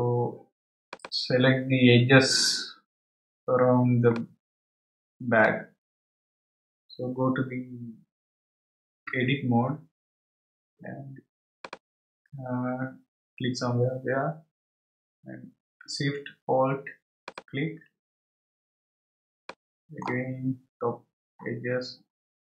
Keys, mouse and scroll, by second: 0.8 click, 3.3-4.1 scroll down 1, 4.1-6.4 middle drag, 6.4-9.1 scroll down 1, 10.1 Tab, 10.4 scroll up 2, 11.6 click, 17.2 alt+shift+click, 18.6-19.1 scroll down 3, 19.5-20.7 middle drag, 20.7-21.4 scroll up 4.